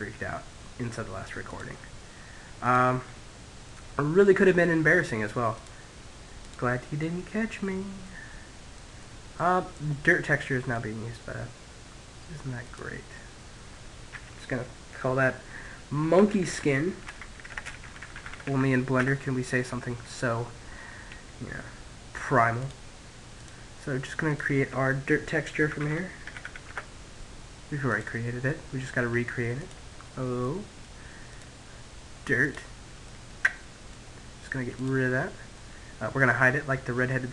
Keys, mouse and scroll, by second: 0.3 click, 2.0-4.4 middle drag, 4.4 click, 5.4 click, 6.2-7.5 middle drag, 7.7-9.8 middle drag, 11.4 click, 19.0-21.3 middle drag, 21.5-25.0 drag, 26.7 click, 29.2-30.9 middle drag, 30.1 click, 31.9-33.4 middle drag, 33.7 click, 34.3 middle click, 35.4 middle click, 36.1-37.3 middle drag.